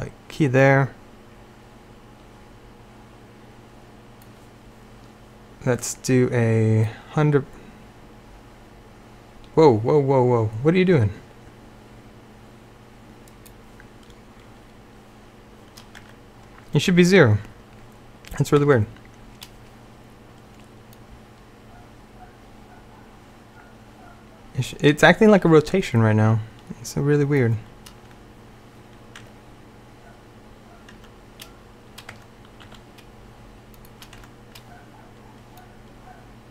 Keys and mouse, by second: 0.7-2.7 drag, 6.9-15.2 drag, 16.1 Tab, 18.7 Tab, 21.0-22.2 drag, 29.3 Tab, 31.0 Tab, 32.2 Tab, 32.8 s, 34.3 Tab.